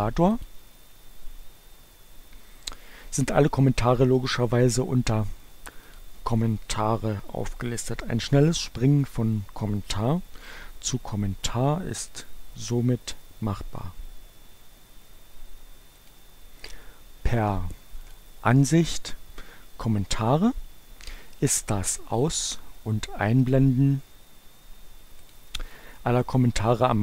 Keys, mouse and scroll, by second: 0.3 click, 5.9 click, 12.1 click, 15.4-16.6 drag, 18.1 click, 22.1 click, 23.5 click, 24.9 click.